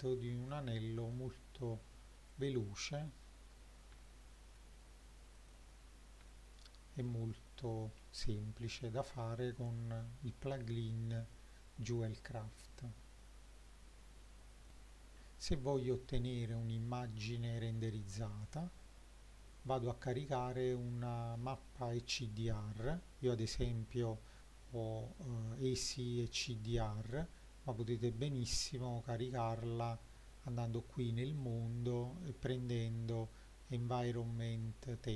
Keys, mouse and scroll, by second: 0.3-0.7 scroll up 3, 1.1 middle click, 2.9 click, 4.0-4.5 shift+middle drag, 5.5 click, 6.3-7.1 shift+middle drag, 7.4 click, 7.9-8.5 scroll down 2, 14.7 shift+middle click, 15.8 click, 18.5 click, 29.3 click, 31.4-35.0 drag.